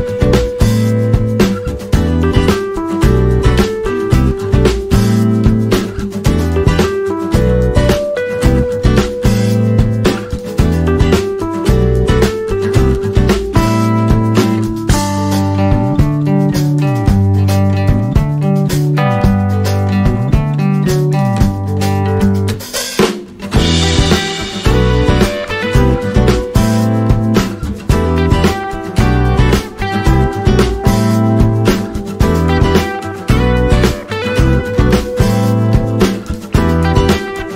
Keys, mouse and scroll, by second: 0.3 scroll up 1, 1.4 alt+scroll up 1, 2.8-5.2 drag, 5.2 alt+scroll down 1, 6.5 alt+scroll up 1, 7.4-11.8 drag, 12.6 alt+scroll down 1, 13.5 click, 14.8 click, 15.6 ctrl+z, 16.1 click, 17.2-17.9 typing, 17.5-21.6 drag, 21.6 Up, 23.4 right click, 24.6 click, 27.5 shift+click, 29.7 ctrl+g, 31.3-34.2 alt+drag, 34.7 click, 35.7-37.5 typing, 37.4 click.